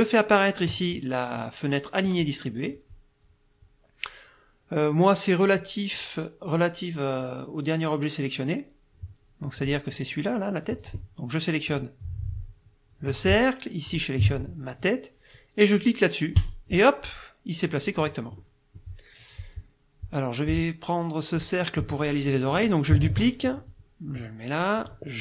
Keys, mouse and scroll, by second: 2.1 click, 9.6 click, 10.8 click, 11.7 click, 13.9 shift+click, 16.4 click, 18.0 click, 18.4 middle click, 21.4 click, 23.1 ctrl+d, 23.7-25.1 drag.